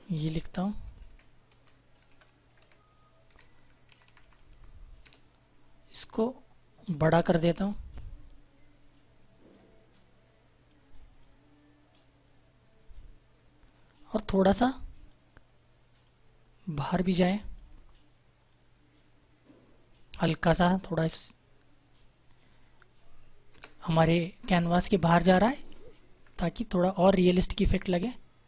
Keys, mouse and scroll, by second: 0.1-3.8 typing, 4.9 Return, 6.6 click, 9.4 click, 23.4 Return, 24.8 Down, 26.1 Left, 26.9 Right, 27.8 click.